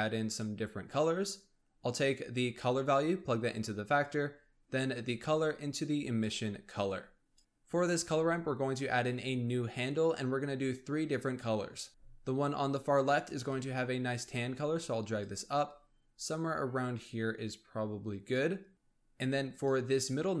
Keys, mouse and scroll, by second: 0.6-2.5 scroll up 4, 2.5 click, 4.8 click, 6.9-7.4 drag, 7.4-10.0 scroll up 2, 10.1-11.9 drag, 11.9-13.3 scroll up 1, 13.3 click, 19.4-20.4 drag.